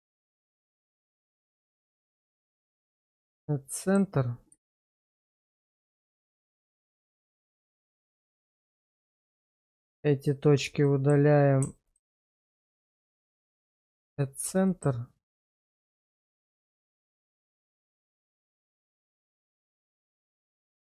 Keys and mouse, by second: 0.4 alt+shift+click, 2.7 shift+1, 3.4 shift+middle click, 4.7 shift+middle click, 6.2 shift+click, 6.9 middle click, 7.5 shift+middle click, 8.7 shift+click, 9.7 x, 10.9 shift+middle click, 11.9 alt+click, 13.9 shift+1, 14.7 shift+middle click, 15.3 middle click, 15.9 shift+middle click, 16.3 shift+middle click, 16.7 shift+middle click, 17.6 shift+middle click, 20.2 shift+click, 20.7 shift+click.